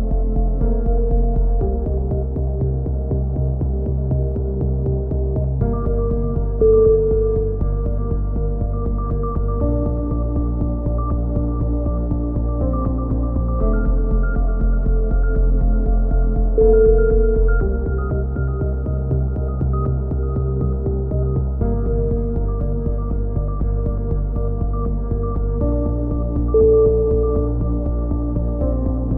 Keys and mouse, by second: 0.1 click, 1.2 right click, 1.8 middle click, 2.6 click, 3.8 a, 4.1 click, 4.4 middle click, 4.9 right click, 5.0 click, 5.1 right click, 5.2 click, 5.7 a, 6.5 z, 6.9-8.6 drag, 7.1 z, 8.9 a, 9.1 middle click, 9.2 z, 9.5 z, 17.5-18.6 middle drag.